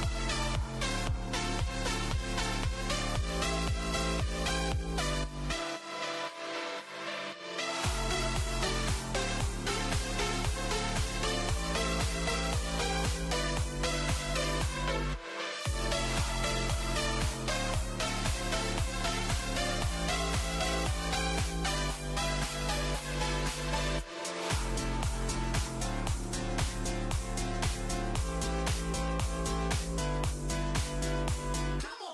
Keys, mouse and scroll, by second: 1.5-1.9 scroll down 3, 2.1-2.7 middle drag, 2.7 click, 3.0 click, 4.2 click, 5.0-7.5 drag, 7.9 click, 8.9 click, 9.2 scroll down 3, 9.5-10.2 middle drag, 10.2-10.6 scroll up 2, 10.6-11.6 shift+middle drag, 11.6 click, 12.9 click, 13.5-14.1 middle drag, 14.1-14.5 scroll up 2, 14.8-17.3 middle drag, 18.5 Tab, 19.1 2, 20.1 alt+click, 20.3 alt+click, 21.3 alt+click, 21.4 alt+click, 23.1 alt+shift+click, 23.2 alt+shift+click, 23.7 alt+shift+click, 24.7 alt+shift+click, 25.4 alt+shift+click, 25.8-28.3 middle drag, 29.4 ctrl+b.